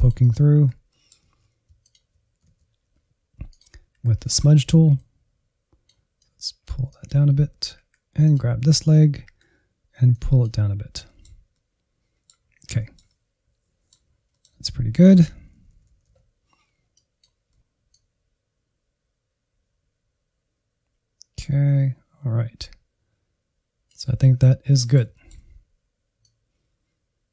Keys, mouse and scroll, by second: 0.4 Insert, 0.8 middle click, 1.2 alt+z, 2.1 ctrl+click, 2.4 alt+z, 3.5 click, 3.9 Insert, 4.2 middle click, 4.9-7.3 drag, 7.3 alt+z, 7.7 Insert, 8.4 ctrl+click, 8.9 alt+z, 9.1 Insert, 10.1 click, 11.0-12.3 middle drag, 12.3 scroll down 1, 12.4 middle click, 13.3 scroll down 1, 13.5 middle click, 13.7-14.6 Left, 15.2 click, 15.5-16.9 middle drag, 16.9-20.4 drag, 20.4 middle click, 21.3-25.3 drag, 25.3 scroll down 1, 25.7-26.7 shift+middle drag, 26.7 click.